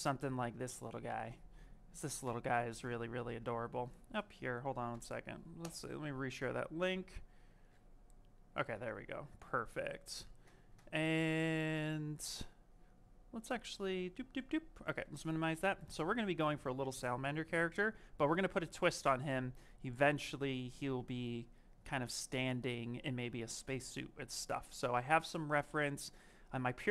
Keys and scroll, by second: 4.8 ctrl+v, 5.5 Return.